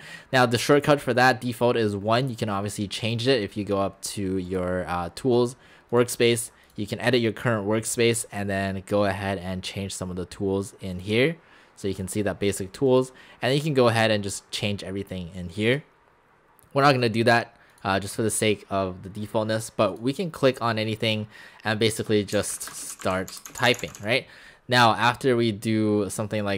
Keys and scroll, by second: 22.0-24.0 typing.